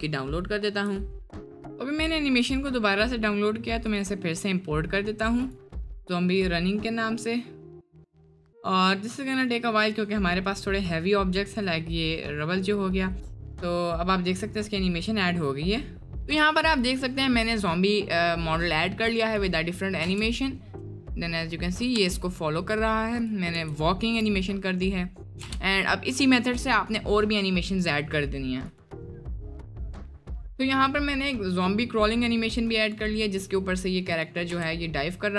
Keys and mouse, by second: 16.1 space, 16.9 click, 17.4 middle drag, 18.0 middle click, 18.6 middle click, 19.4 click, 20.0 space, 22.2 middle drag, 22.2 space, 23.2 click, 23.6 space, 23.9 middle click, 25.5 space, 26.1-27.2 drag, 27.8 click, 29.2 space, 29.5-29.9 middle drag, 31.1-31.4 middle drag, 31.8 middle click, 31.9 drag, 32.9 click, 34.2-34.5 drag, 34.5 space.